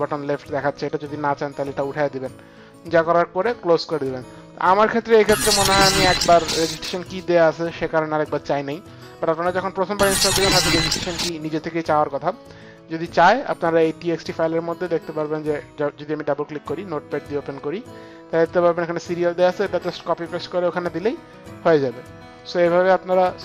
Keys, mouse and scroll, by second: 0.7 click, 1.6 click, 3.4 click, 12.9 click, 14.2 click, 14.9 click, 17.2 click, 18.4 click, 21.9 click.